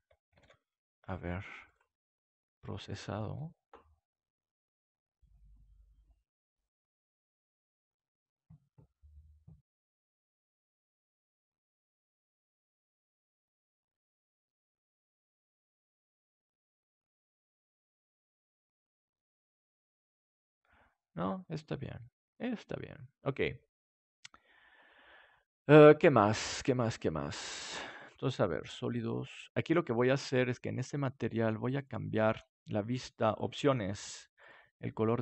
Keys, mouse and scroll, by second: 0.3 ctrl+s, 1.6-5.4 drag, 27.9-30.7 drag, 30.7-34.6 right drag, 31.7-35.2 drag, 32.1-34.6 middle drag.